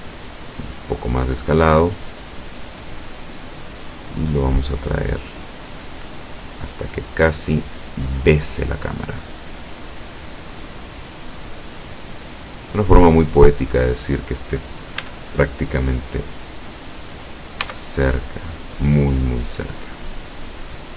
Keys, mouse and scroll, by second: 0.5 click, 1.5-3.0 drag, 3.2 middle click, 5.1-8.4 drag, 8.8 middle click, 10.4-13.1 drag, 14.0 scroll up 1, 15.1 s, 17.7 x, 19.2 click, 20.2-20.9 drag.